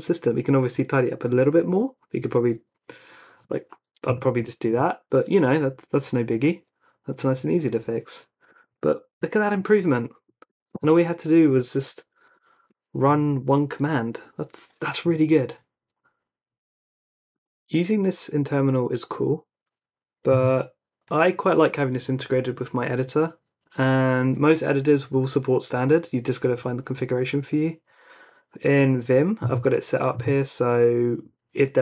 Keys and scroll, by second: 4.2 typing, 8.5 Escape, 8.7-9.1 typing, 10.4 ctrl+r, 11.9 u, 12.6 ctrl+r.